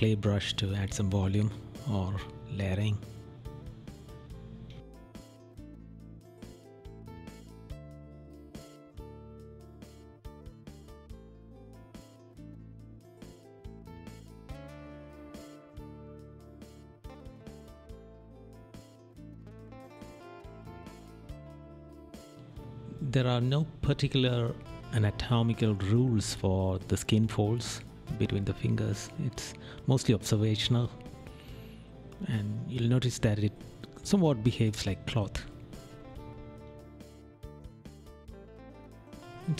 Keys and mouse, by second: 0.0 right click, 5.9 right click, 8.8 right click, 11.2 right click, 13.7 right click, 18.0 right click, 18.5 right click, 19.1 right click, 20.5 right click, 20.8 right click, 21.5 right click, 22.0 right click, 22.8 right click, 23.6 right click, 24.4 right click, 27.6 right click, 29.8 right click, 30.7 right click, 35.3 right click.